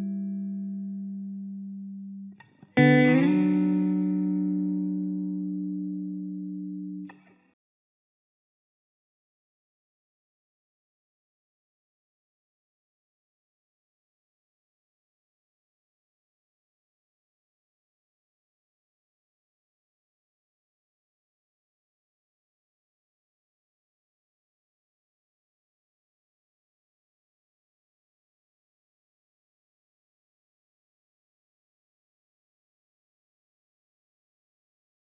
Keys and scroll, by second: 27.3 ctrl+alt+z.